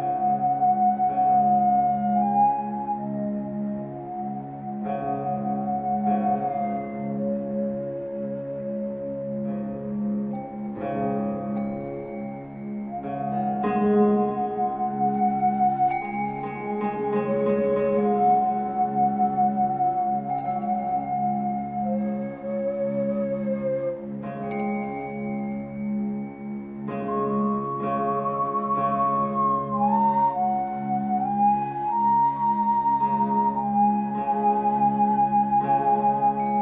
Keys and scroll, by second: 18.2 w.